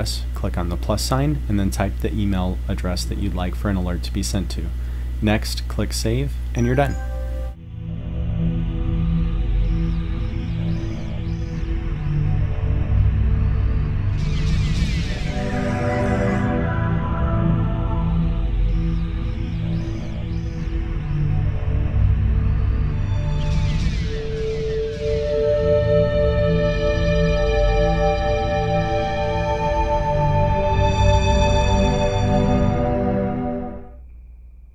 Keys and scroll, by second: 0.3 Tab, 2.1-2.9 typing.